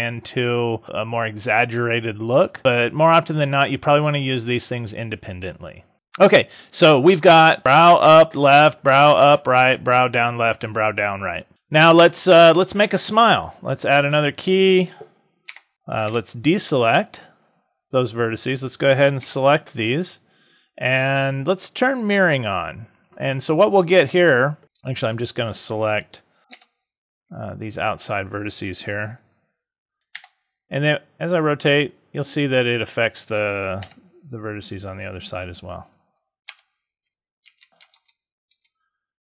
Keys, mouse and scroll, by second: 14.0 click, 15.4 Tab, 16.0 a, 19.1 l, 22.0 click, 24.6 click, 26.4 b, 30.1 r, 33.3 click, 33.8 g, 37.5 ctrl+z, 37.9 ctrl+KP_Add, 38.5 ctrl+KP_Add.